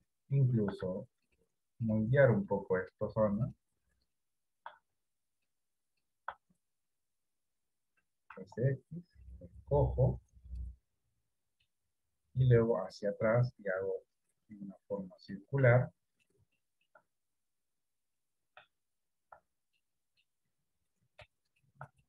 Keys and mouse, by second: 2.8 middle click, 7.3 KP_1, 8.7 s, 11.3 middle click, 12.8-15.5 drag, 16.1 middle click, 17.0 shift+middle click, 20.1 middle click.